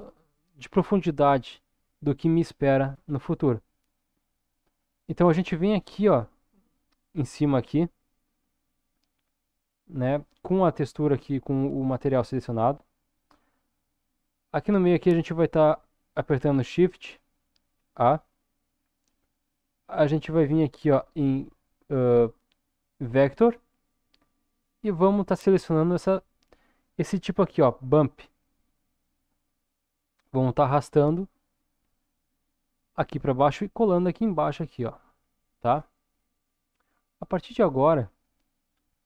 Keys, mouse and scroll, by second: 6.1 click, 10.9 click, 17.8 shift+a, 35.2-36.1 scroll down 3, 36.1 middle click, 37.4-38.7 scroll up 4, 38.7 scroll up 1.